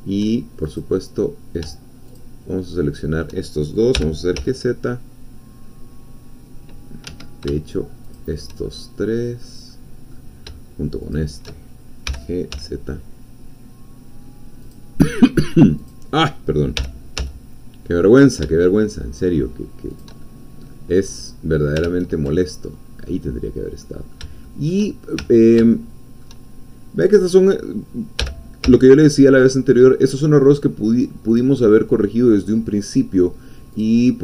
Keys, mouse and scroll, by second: 0.7 click, 2.2-3.3 shift+drag, 3.9 g, 4.4 z, 7.0 Escape, 8.2 shift+click, 8.7 shift+middle click, 9.7 middle click, 11.2 shift+click, 12.0 g, 12.6 z, 14.7 click, 15.9 click, 16.8 g, 17.2 z, 19.9 shift+click, 20.2 shift+middle click, 20.6 click, 21.9 ctrl+z, 22.6 ctrl+click, 23.8 click, 24.1-25.2 shift+middle drag, 25.2 ctrl+shift+middle click, 25.9 ctrl+shift+middle click, 27.0 click, 28.2 g, 28.6 z, 31.3 click, 31.6-33.7 middle drag, 33.7 click.